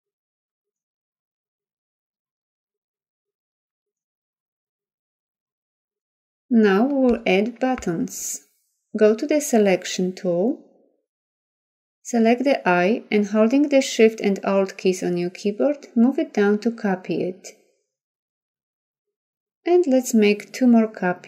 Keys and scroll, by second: 4.8 ctrl+0.